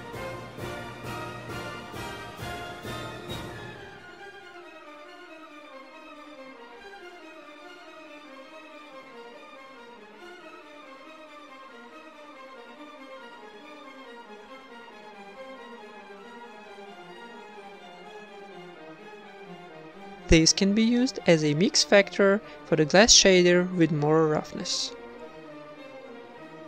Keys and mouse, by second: 0.3-4.9 drag, 4.6 shift+d, 6.2 x, 6.7-8.8 drag, 9.0 click, 9.6 click, 10.2 click, 10.2 shift+d, 10.8 click, 11.9 click, 13.3-14.9 drag, 15.1 click, 16.2 click, 17.2 middle click, 17.9 ctrl+s, 18.6 middle click, 19.6 middle click, 20.7 middle click, 21.5 click, 21.5 shift+d, 22.8 click, 23.4 click, 24.8 click, 25.8 click.